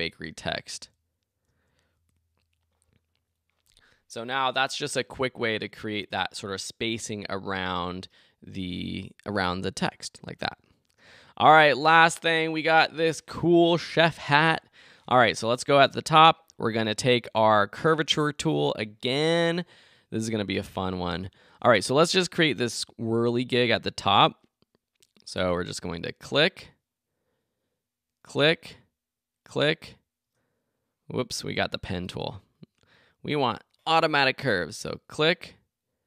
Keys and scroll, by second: 1.5 Left.